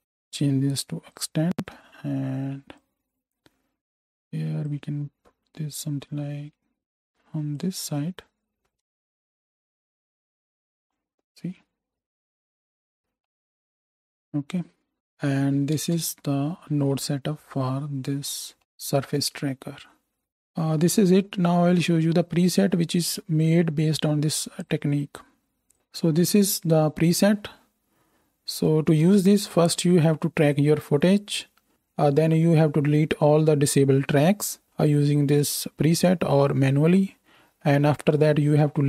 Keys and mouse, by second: 7.6-8.8 middle drag, 9.1 shift+Left, 9.6 space, 13.8-14.9 middle drag, 13.8 space, 14.9 right click, 15.6-18.2 ctrl+drag, 15.8 ctrl+space, 18.2 right click, 18.6-20.3 drag.